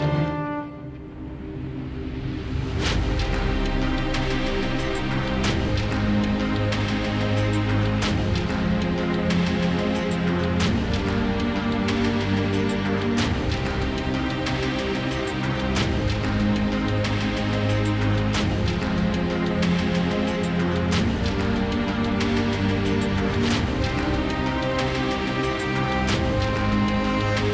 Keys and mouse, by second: 0.5 shift+a, 1.9-3.4 drag, 3.4 shift+b, 8.0-9.5 typing, 11.3 shift+b.